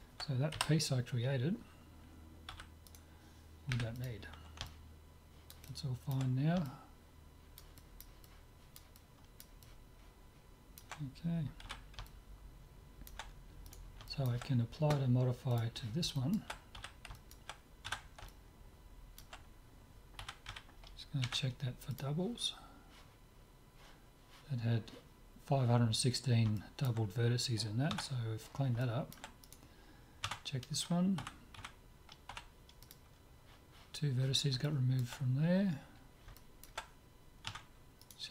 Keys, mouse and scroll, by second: 0.5 KP_Divide, 2.5 z, 3.0-4.9 right drag, 3.7 Delete, 4.7-8.7 middle drag, 11.4 middle click, 11.6 z, 12.9-15.8 middle drag, 13.7 click, 14.1-15.4 drag, 15.6-17.3 drag, 16.1 middle click, 16.2-17.3 right drag, 16.8 z, 17.9 Tab, 20.0 middle click, 20.2 a, 20.6 a, 21.2 w, 26.5-29.4 middle drag, 27.9 Tab, 29.4-30.5 drag, 29.4-31.2 right drag, 30.2 Tab, 31.2 a, 31.6 a, 32.3 w, 34.6 middle click, 37.5 Tab, 38.0-38.3 drag.